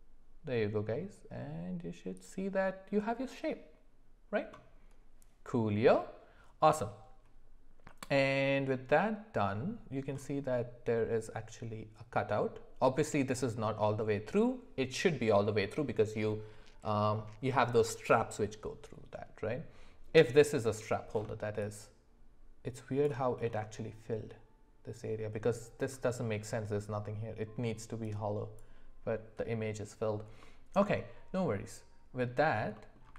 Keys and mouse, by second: 30.4 middle click, 32.8 middle click.